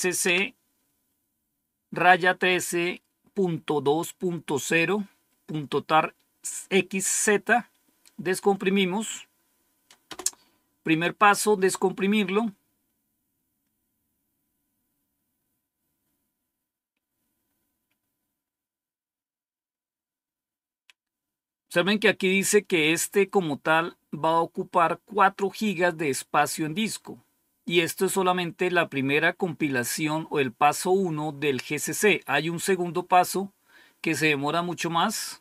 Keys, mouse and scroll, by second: 0.0-0.1 typing, 0.2 Tab, 10.0 Return.